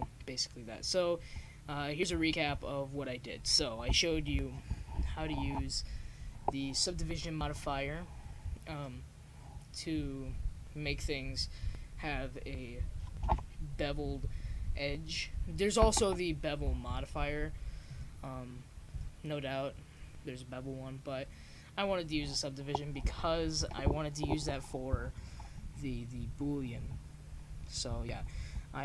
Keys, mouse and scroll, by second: 7.3-14.8 middle drag, 15.1-18.8 drag, 20.7-28.7 middle drag.